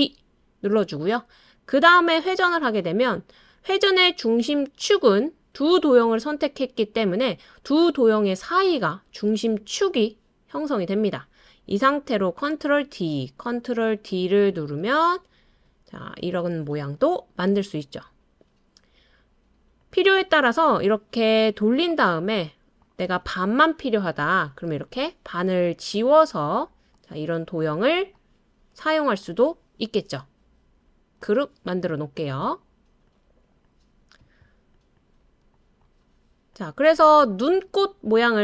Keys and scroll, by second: 12.4 super+d, 13.5 super+d, 14.3 super+d, 24.2 BackSpace.